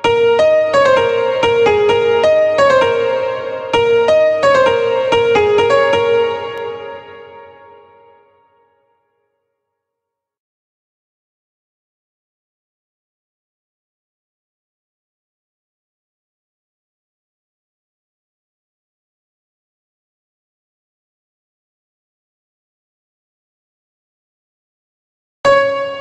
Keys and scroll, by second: 5.9 space.